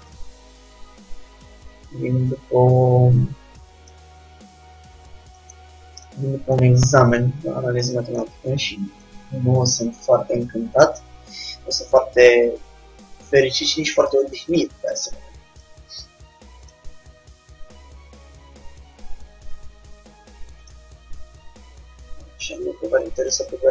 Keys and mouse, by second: 0.3-3.1 drag, 4.5-5.7 middle drag, 5.7 Tab, 9.3 KP_3, 10.2-12.3 middle drag, 14.2 g, 16.1 r, 17.2 g, 21.5-23.7 middle drag, 22.6 g.